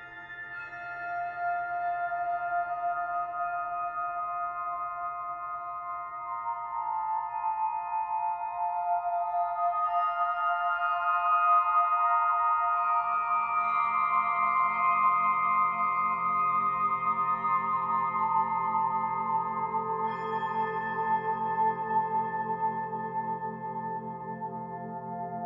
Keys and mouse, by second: 0.6-1.4 alt+drag, 1.7 g, 1.9 y, 2.6 Escape, 3.7 click, 5.1 g, 5.3 y, 7.0 click, 8.1 click, 8.9 shift+click, 10.1 shift+click, 10.3 shift+click, 13.5 s, 14.2 Page_Down, 14.7-15.1 Page_Down, 15.7-24.9 Page_Up, 16.8 y, 17.9-21.7 drag, 22.8 ctrl+alt+click, 23.6 Tab, 24.3-24.9 alt+drag.